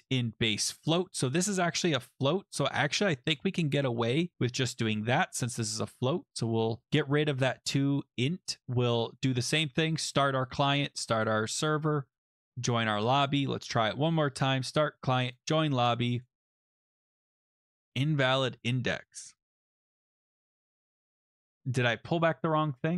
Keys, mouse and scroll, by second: 3.2 click, 4.0 BackSpace, 4.3 ctrl+s, 5.4 click, 6.8 click, 7.9 click, 8.6 click, 8.8 click, 10.0 click, 10.1 click, 10.3 ctrl+v, 10.9 alt+Tab, 12.2 click, 12.8 click, 12.9 ctrl+b, 13.6 ctrl+v, 14.4 click, 15.3 click, 16.2 click, 21.2 click.